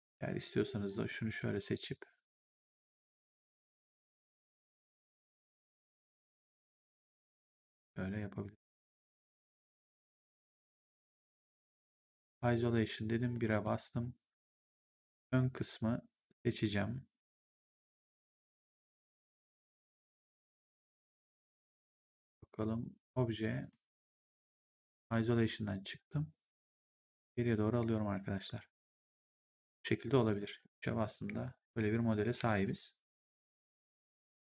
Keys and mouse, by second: 0.2 right click, 1.0 click, 3.4 ctrl+click, 5.3 click, 9.2 right click, 11.9 ctrl+1, 13.2 1, 15.2 right click, 17.3 click, 21.8 click, 23.5 click, 24.3 ctrl+1, 26.5 click, 29.1 right click, 29.5 click, 30.5 3, 30.9 click.